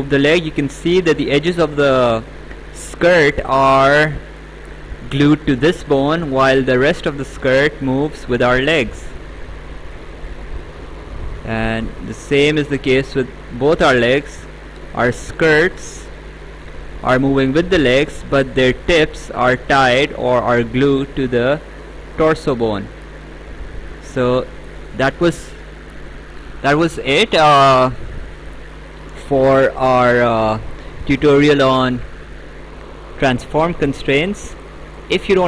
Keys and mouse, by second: 7.5 click, 12.2 ctrl+click, 25.3 right click, 28.3 right click, 30.5 click, 32.3 click, 34.9 click.